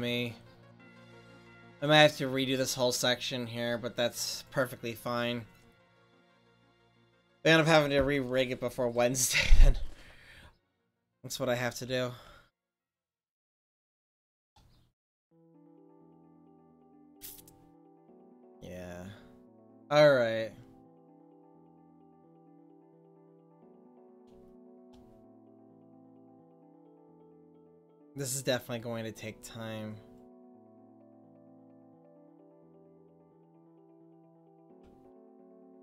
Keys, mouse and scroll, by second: 11.9 ctrl+z, 15.4-16.4 drag, 16.9 ctrl+z, 30.3-33.2 drag, 33.2 ctrl+z, 34.2 ctrl+z.